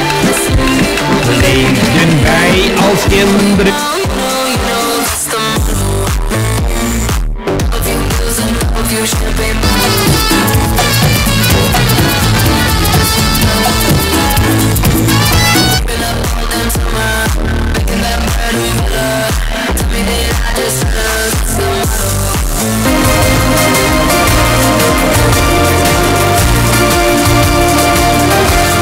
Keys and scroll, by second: 3.8 Page_Down, 16.4 Page_Down.